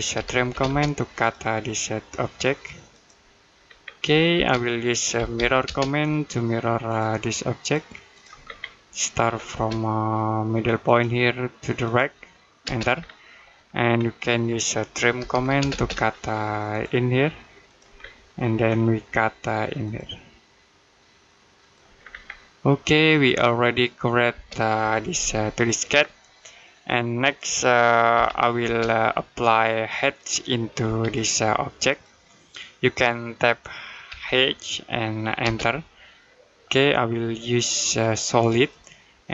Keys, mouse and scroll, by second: 0.0-0.4 typing, 1.0 click, 3.5-3.9 scroll down 1, 3.9 middle click, 4.2 space, 5.0 m, 5.5 space, 6.7 click, 8.3-8.6 scroll down 1, 8.6 middle click, 9.1-9.4 scroll up 1, 9.4 space, 10.7 click, 12.5 space, 12.8-13.1 scroll down 1, 13.1 middle click, 13.5-14.3 scroll up 1, 14.3 middle click, 15.0 t, 15.4 space, 15.7-16.5 scroll up 1, 16.5 click, 17.8 scroll down 1, 18.1 middle click, 18.5-19.7 scroll up 1, 19.7 click, 21.8-22.5 scroll down 1, 22.5 middle click, 23.1-23.6 scroll down 1, 23.6 middle click, 24.1 space, 25.8-26.2 scroll down 1, 26.2 middle click, 28.0 m, 28.5 space, 29.2 click, 30.7 space, 30.8 click, 33.9 h, 35.3 space, 37.7 click.